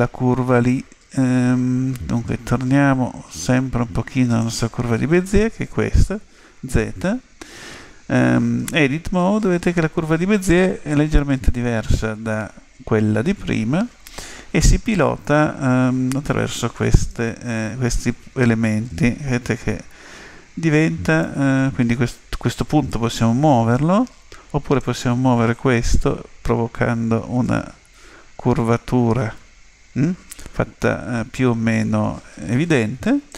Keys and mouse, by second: 4.4 click, 6.1 z, 8.6 Tab, 16.8-18.8 right drag, 18.0 click, 24.8 right click, 26.0 g.